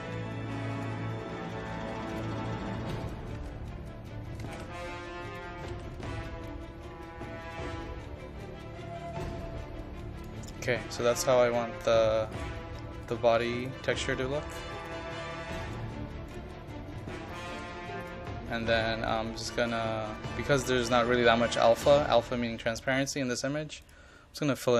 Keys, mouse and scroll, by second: 3.4 ctrl+a, 4.5 c, 5.3 click, 5.6 ctrl+v, 6.3-24.7 drag.